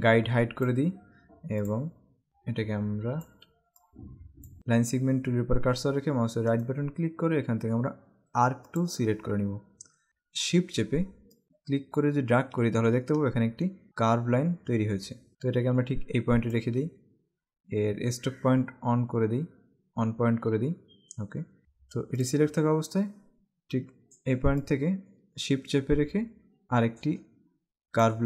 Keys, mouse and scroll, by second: 3.8 click, 6.6 right click, 8.8 click, 18.7 scroll up 1, 22.4 click, 24.6 shift+click.